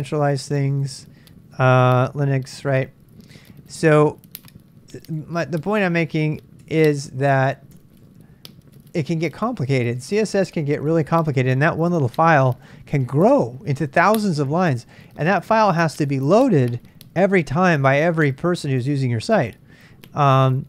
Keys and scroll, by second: 1.6-2.9 typing, 6.6-9.4 typing, 9.5 Return.